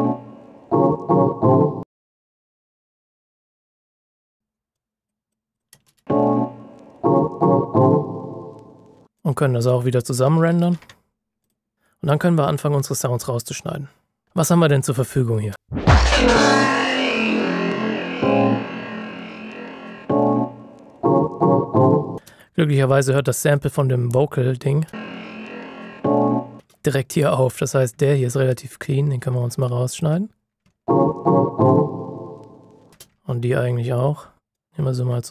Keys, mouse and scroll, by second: 1.9 click, 2.4 ctrl+shift+scroll up 2, 2.8 ctrl+click, 3.5-4.1 ctrl+shift+scroll down 2, 4.4 space, 4.7 click, 5.7 space, 9.1 click, 10.6 ctrl+shift+b, 11.3 click, 15.5 click, 15.5 space, 17.6-19.3 ctrl+alt+scroll up 4, 19.4 ctrl+shift+scroll up 1, 20.0-22.0 scroll up 1, 22.1 space, 23.5 click, 24.8 space, 27.3-27.9 ctrl+shift+scroll up 2, 28.5 ctrl+click, 29.6 alt+click, 30.6 ctrl+shift+scroll down 1, 30.8 click, 31.3-32.8 ctrl+shift+scroll up 2, 32.8 space, 34.5 ctrl+click.